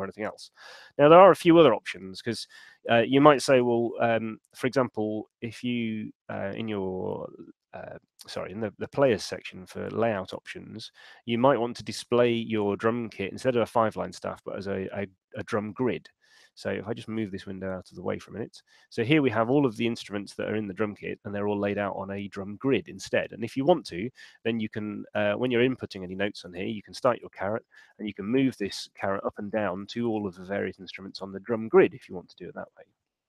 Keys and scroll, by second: 3.8 shift+super+l, 26.6 Return, 27.2 Down, 28.0 Up, 29.8 Down, 30.6 Up, 31.4 Down.